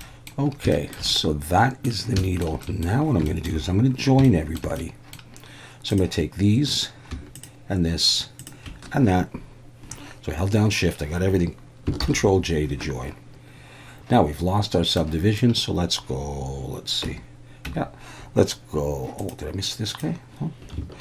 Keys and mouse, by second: 0.0 middle click, 0.7 shift+middle drag, 1.1-1.9 middle drag, 2.2 shift+middle drag, 2.6 middle click, 3.3 shift+middle drag, 4.2-4.6 shift+middle drag, 4.8-5.1 middle drag, 7.4 shift+click, 8.4 shift+click, 12.0 ctrl+j, 15.0-15.4 middle drag, 17.1 Tab, 17.7 Tab, 19.3-20.7 drag.